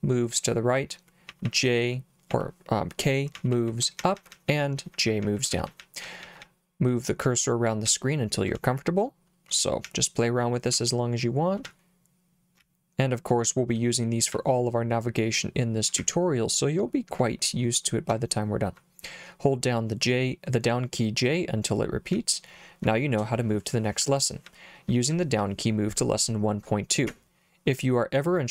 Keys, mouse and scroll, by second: 1.3-6.4 typing, 7.9 j, 8.5 k, 9.9 j, 10.7 k, 11.7 h, 12.6 l, 14.3 h, 16.0 l, 18.1 j, 22.1 j, 24.0 j, 24.5 j, 25.1 j, 25.4 j.